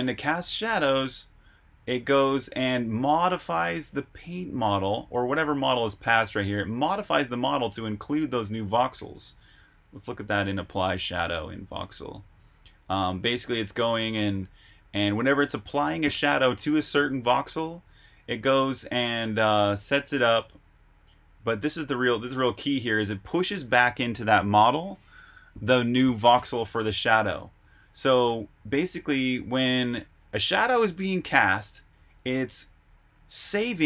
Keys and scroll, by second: 0.6-3.2 typing, 8.6-13.2 typing, 11.6 Escape, 19.1-22.5 typing.